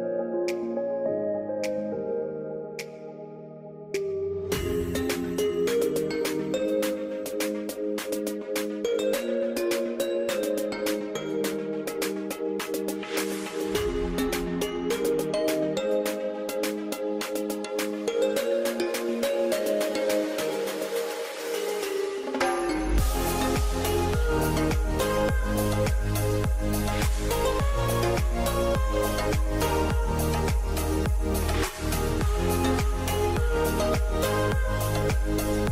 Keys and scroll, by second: 0.3-1.6 typing, 8.4 r, 11.9-14.5 typing, 15.6-17.3 typing.